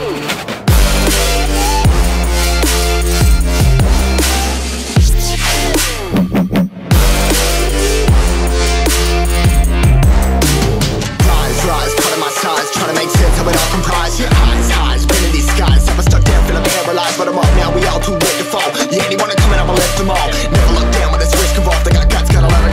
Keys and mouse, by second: 0.8 click, 3.5 click, 5.0 click, 5.9 ctrl+c, 6.3 click, 7.4 ctrl+v, 8.1-10.1 drag, 11.5-12.2 middle drag, 12.6 Tab, 12.9-14.0 middle drag, 15.6 s, 15.9 z, 21.0-21.8 drag, 21.8 space.